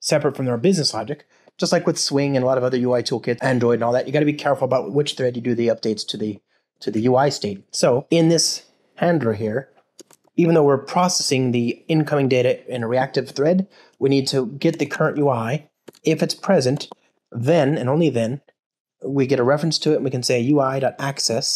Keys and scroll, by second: 12.1 Return.